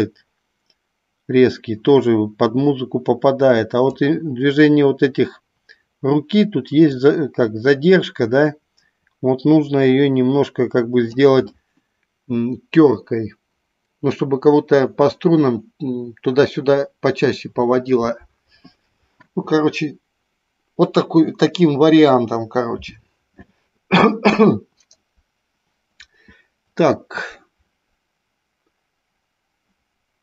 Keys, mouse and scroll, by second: 7.7-12.0 drag.